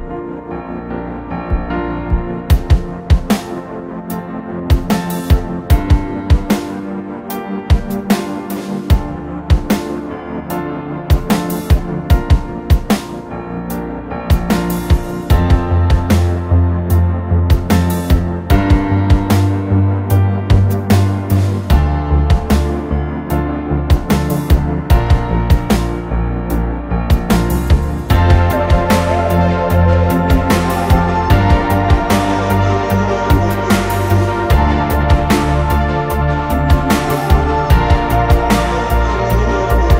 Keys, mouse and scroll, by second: 2.0 typing, 5.3 Return, 6.2-6.5 scroll down 1, 6.9 scroll down 1, 7.1 double click, 7.4 right click, 8.8 middle click, 9.1 scroll down 1, 9.2 scroll up 1, 9.5 middle click, 10.4 typing, 11.7 typing, 11.8 Return, 12.3 scroll down 1, 12.4 middle click, 13.3-13.6 scroll up 1, 14.3 typing, 15.7 scroll up 1, 16.7 5, 16.8 Return, 18.2 5, 18.3 Return, 19.9 5, 20.9 2, 21.0 Return, 21.5 scroll down 1, 21.7 middle click, 22.5 r, 23.8 middle click, 24.8 typing, 27.5 middle click, 28.3 ctrl+z, 28.4 ctrl+z, 28.7 scroll up 1, 29.3 a, 30.6 Escape, 31.7 double click, 33.0 space, 33.5 middle click, 33.8 p, 34.2 double click, 34.6-34.9 scroll down 1, 34.9 scroll up 1, 35.1 e, 36.5 scroll down 1, 36.8-37.5 typing, 37.1 scroll up 1, 37.9 scroll down 1, 39.3 scroll down 1, 39.4 middle click.